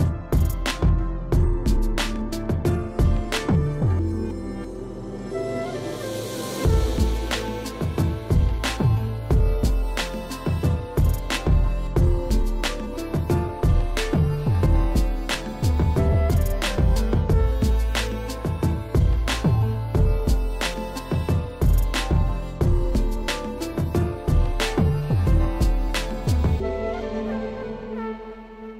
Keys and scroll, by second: 3.3 space, 3.7 space, 13.7 space, 14.5 [, 18.1 ctrl+space, 18.3 ctrl+space, 18.5 [, 19.1 [, 22.5 ], 26.3 ].